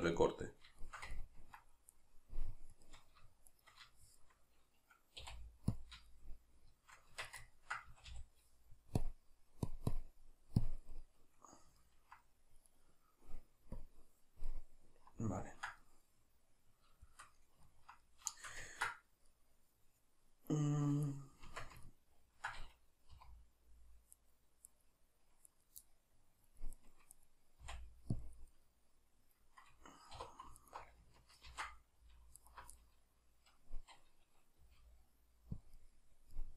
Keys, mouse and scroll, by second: 1.9 right click, 2.7-4.0 shift+right drag, 4.0-9.0 shift+middle drag, 5.2 x, 7.1 Tab, 7.9 a, 9.0-11.0 drag, 11.0-12.7 middle drag, 12.7 right click, 13.8 click, 14.5-21.1 middle drag, 21.1 right click, 21.5 Tab, 21.9-24.2 ctrl+middle drag, 23.2 3, 24.2 right click, 24.7 right click, 25.5 right click, 25.9-26.8 middle drag, 26.8 right click, 27.1 right click, 27.7 x, 28.7-30.6 middle drag, 30.2 2, 30.6 alt+right click, 31.5 ctrl+x, 32.4 alt+right click, 32.8-35.7 middle drag, 34.6 g, 35.7 click, 35.8-36.5 middle drag.